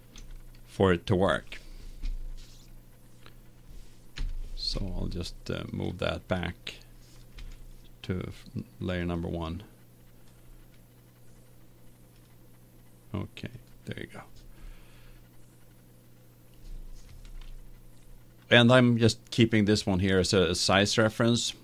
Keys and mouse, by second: 1.1-4.1 middle drag, 4.1 KP_1, 5.7 click, 7.3 m, 12.1-15.5 drag, 15.8-19.4 middle drag, 19.4-21.6 right drag.